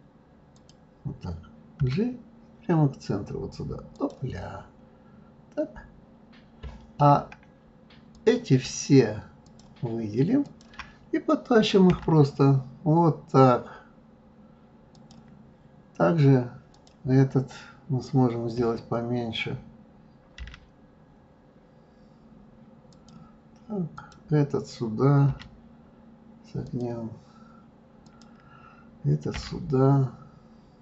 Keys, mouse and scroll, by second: 0.5 click, 1.8 g, 4.5-6.1 scroll down 6, 8.1 click, 9.4 shift+click, 10.4 shift+click, 11.9 g, 16.7 click, 24.0 click, 25.3 g, 28.0 click, 29.4 g.